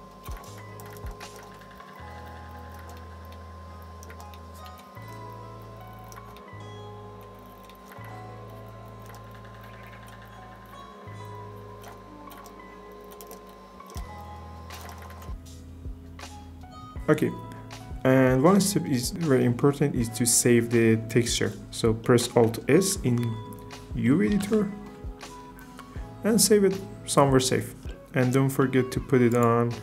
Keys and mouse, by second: 1.5 click, 1.9 click, 2.5 click, 2.7 shift+middle click, 5.3 click, 7.6 right click, 8.5 click, 8.8 click, 9.6 click, 10.2 click, 13.3 shift+f, 13.4 click, 13.9 shift+f, 14.1 click, 24.5 alt+s, 27.9 click, 29.3-29.8 drag.